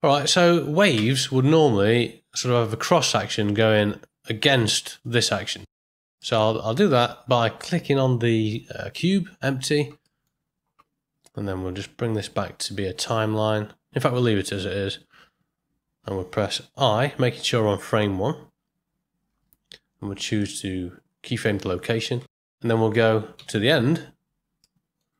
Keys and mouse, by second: 0.9 space, 5.7 space, 6.2 middle click, 6.8 shift+Left, 8.4 click, 10.1 middle click, 12.1-14.1 drag, 19.3 i, 23.3 shift+Right, 24.7 middle click.